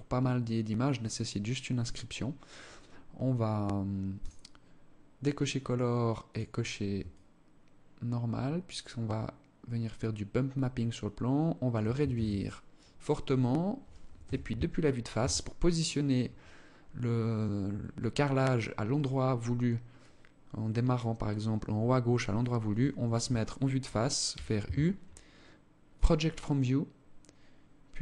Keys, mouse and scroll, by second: 1.3-3.4 scroll down 16, 3.4 click, 5.5 click, 6.3 shift+click, 11.4 ctrl+s, 13.5 KP_1, 14.4 Tab, 23.6 u.